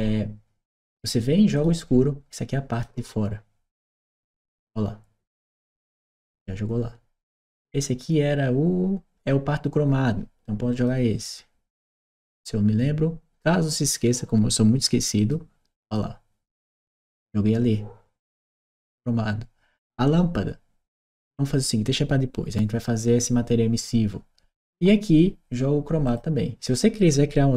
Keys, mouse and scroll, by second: 2.6 click, 4.0-5.4 drag, 6.0-7.1 drag, 10.6 click, 15.0 click, 16.6 click, 25.9 click.